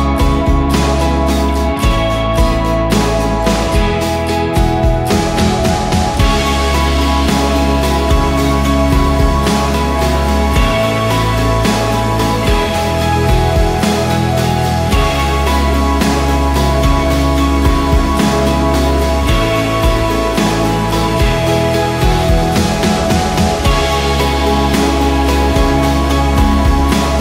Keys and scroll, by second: 1.8 Right, 2.0 Down, 2.3 Down, 2.5 Down, 2.8 Right, 5.3 ctrl+g, 9.2 Return, 14.0-18.2 typing, 19.9 ctrl+t, 21.0 ctrl+a, 22.5 6, 23.1 Return, 23.2 Return, 23.5 ctrl+a, 24.2 ctrl+d, 26.4 ctrl+t.